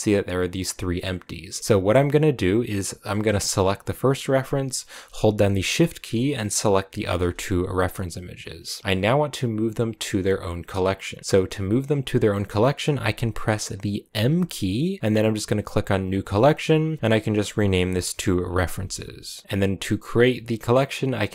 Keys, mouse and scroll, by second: 1.6 click, 3.6 click, 6.3 shift+Left, 6.9 shift+Left, 8.4 middle click, 8.4-13.2 scroll down 2.